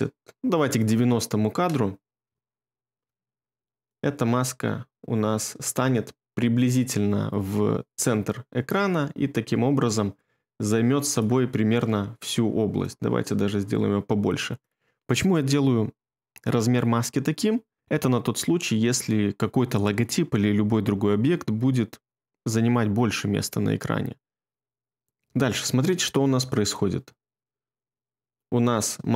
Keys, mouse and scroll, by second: 1.9 middle click, 2.5 ctrl+middle click.